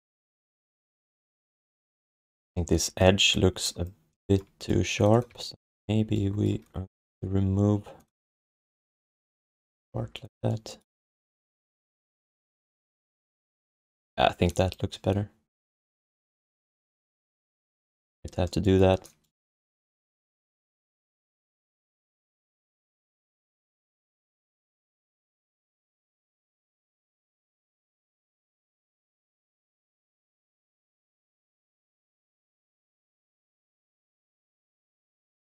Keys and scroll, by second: 0.4 1, 2.0 alt+shift+d, 8.4 g, 9.2 alt+shift+d, 9.9 3, 17.2 1, 18.1 alt+q, 23.0 q, 23.5 3, 23.9 alt+shift+d, 25.6 alt+q, 33.9 1, 34.9 alt+q.